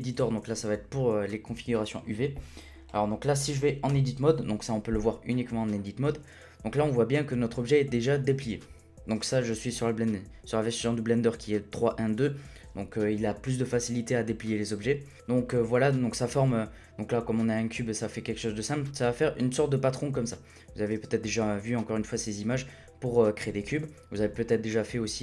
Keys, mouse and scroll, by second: 2.9-3.9 scroll up 4, 3.9 Tab.